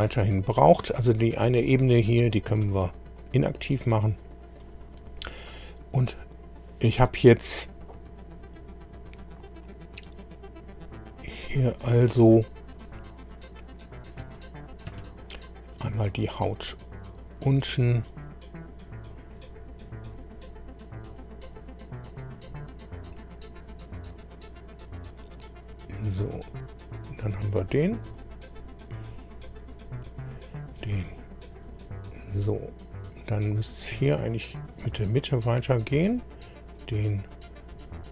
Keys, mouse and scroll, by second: 2.0 click, 2.5 space, 3.9 scroll up 2, 4.6 click, 8.4 scroll down 2, 8.5-8.8 scroll up 2, 9.4 scroll up 2, 10.2-10.9 scroll down 4, 11.8 click, 14.2 space, 19.1 click, 19.8-20.1 scroll down 1, 20.3-20.7 scroll down 1, 21.5-22.1 scroll up 2, 23.8-24.8 scroll up 2, 26.4 click, 28.0 click, 29.4 scroll down 1, 30.2 click, 31.5 click, 32.9-33.5 scroll down 4, 34.1 click, 35.8 click, 37.1 click.